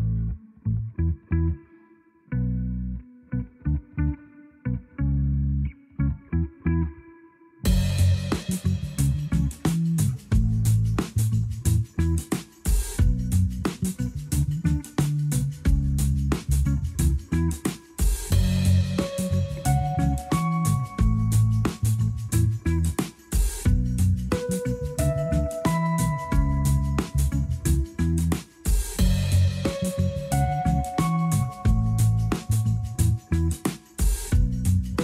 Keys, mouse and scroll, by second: 0.6 a, 0.8 a, 1.0 scroll down 3, 2.2 click, 3.5-6.1 drag, 12.7 click, 30.7 click, 31.7-34.7 drag.